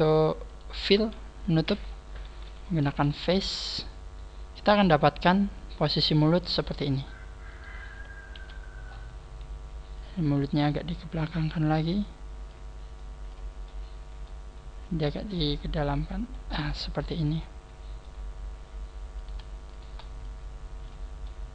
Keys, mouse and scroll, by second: 0.1 shift+right click, 1.7 f, 2.3 a, 3.2 scroll down 1, 4.2 scroll down 5, 4.5 middle click, 7.5 right click, 8.4 KP_1, 8.9-9.3 scroll up 7, 9.9 scroll up 3, 10.7 click, 10.7 scroll up 1, 12.0 click, 12.9 click, 13.0 click, 13.7 middle click, 15.0 click, 16.7 middle click, 19.1 right click, 19.7 shift+right click, 20.2 click, 21.3 middle click.